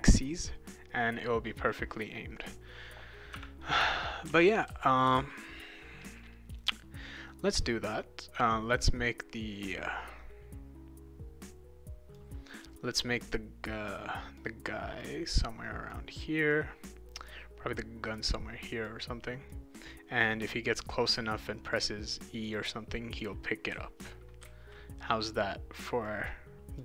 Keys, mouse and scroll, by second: 3.9-6.6 right drag, 4.0-5.7 typing, 7.4-12.1 drag, 13.9 click, 15.0 click, 16.5 click, 18.1 click, 19.5-20.6 drag, 21.3 click, 22.5 click, 23.5-25.2 right drag, 23.7 a, 24.4 q, 26.1 click.